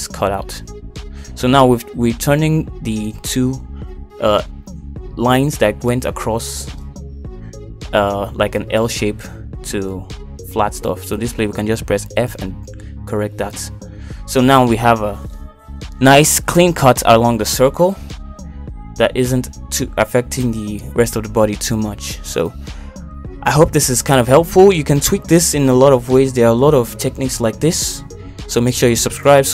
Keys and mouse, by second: 12.2 click, 12.6 shift+click, 13.3 shift+click, 14.3 f, 15.4 Tab, 16.0 middle click, 16.9 middle click, 18.7 middle click, 19.6 middle click, 20.3 click, 20.8 middle click, 21.6 shift+middle click, 24.8 click, 25.0 Tab, 27.8 shift+middle click, 29.1 shift+middle click.